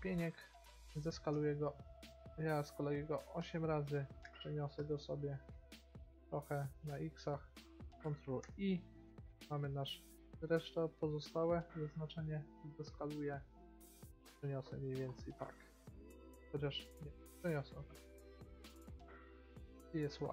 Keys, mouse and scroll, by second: 1.1 s, 4.4 g, 8.6 ctrl+i, 10.2 g, 11.7 s, 13.8 g, 17.1 g, 19.3 g.